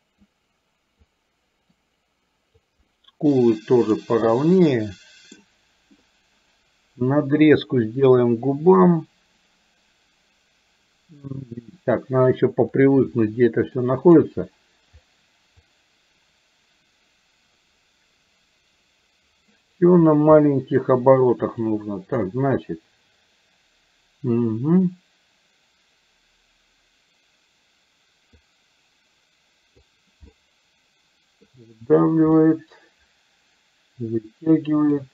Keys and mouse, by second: 0.3 click, 1.7-2.7 drag, 2.9-4.1 middle drag, 4.3-5.4 middle drag, 12.9 click, 13.8 middle click, 15.7-19.7 drag, 20.4 middle click, 21.7 click, 28.4-29.8 drag, 30.3-31.4 middle drag, 32.4-34.9 middle drag.